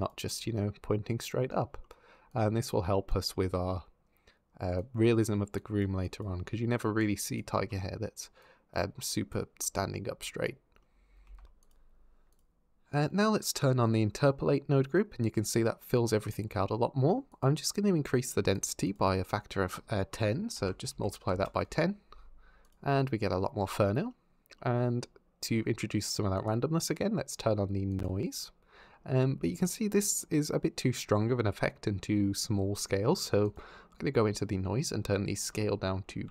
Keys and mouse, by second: 1.6-3.9 middle drag, 4.6 click, 8.2 click, 8.9 click, 11.1 ctrl+Tab, 14.0 click, 17.1 click, 18.3-21.6 drag, 22.4 click, 22.8 middle drag, 26.3 click, 28.1 click, 33.3 click, 35.2-36.3 drag.